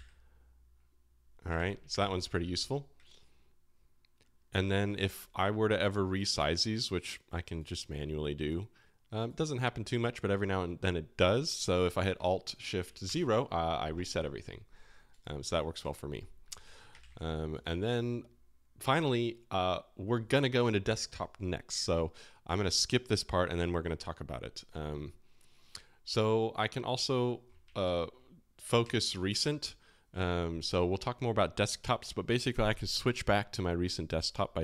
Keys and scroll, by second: 1.5 alt+e, 1.9 alt+e, 13.0 alt+shift+0, 16.0 0, 16.6 alt+i, 16.9 super+w, 27.8 alt+o, 28.8 alt+o.